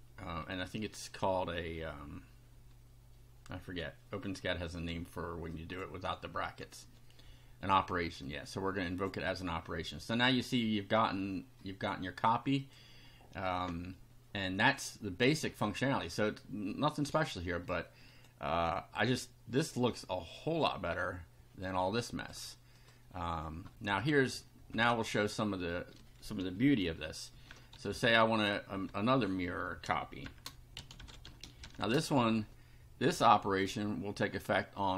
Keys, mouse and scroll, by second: 5.5 click, 6.6 F5, 8.2-9.2 drag, 12.6 click, 16.9 click, 18.1 click, 19.8-20.8 drag, 21.6 click, 22.8 click, 24.7 Return, 27.1-29.1 typing, 30.2-32.3 typing, 33.6 click, 34.8-34.9 drag.